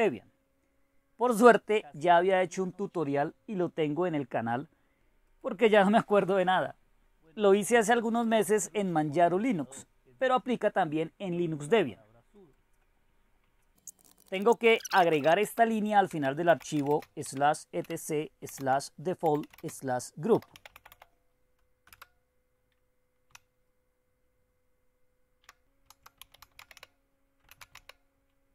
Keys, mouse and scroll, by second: 0.0-2.5 drag, 2.8-5.0 drag, 5.3-6.8 drag, 11.9-13.7 drag, 13.7-28.2 typing, 25.9 Caps_Lock.